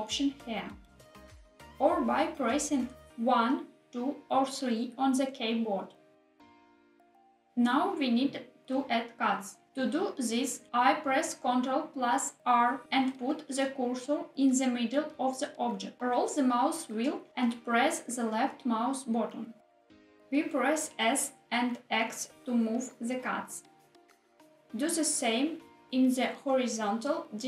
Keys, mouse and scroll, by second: 1.6 1, 2.5 click, 3.2 g, 4.3 click, 4.5 ctrl+z, 4.7 2, 5.5 click, 6.1 g, 6.5 click, 7.1 ctrl+z, 7.1 3, 7.3 click, 7.9 g, 8.6 click, 9.4 ctrl+z, 11.5 ctrl+r, 15.8 click, 19.4 s, 20.1 x, 25.0 click, 26.1 ctrl+r.